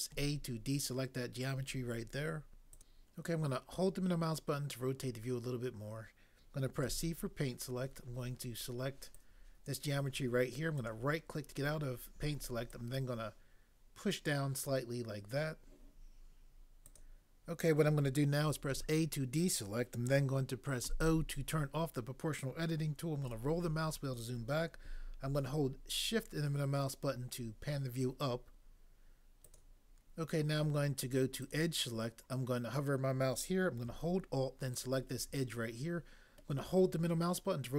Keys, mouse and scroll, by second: 0.2 a, 6.9 c, 18.7 a, 20.8 o.